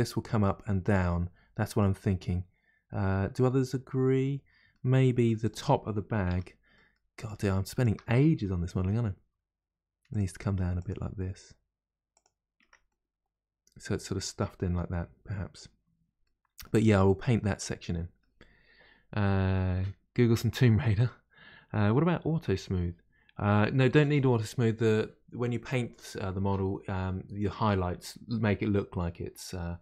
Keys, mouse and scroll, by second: 1.8-5.4 middle drag, 5.4 click, 6.3 Tab, 6.7 middle click, 7.1 click, 7.7 shift+click, 8.8 g, 10.8 click, 11.0 g, 11.1 g, 12.6 Tab, 12.9-15.9 middle drag, 16.2-20.7 middle drag.